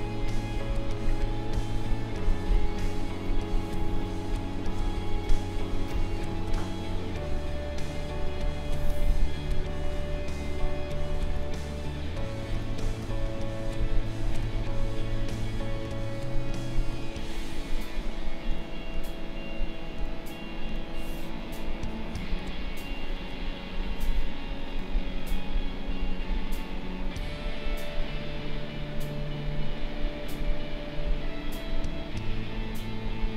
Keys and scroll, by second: 2.5 space, 21.7 space.